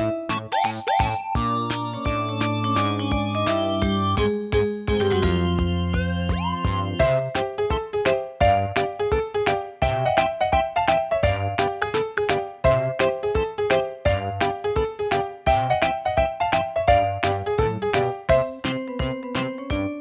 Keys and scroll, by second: 10.3 super+d, 16.4 4, 17.7 typing.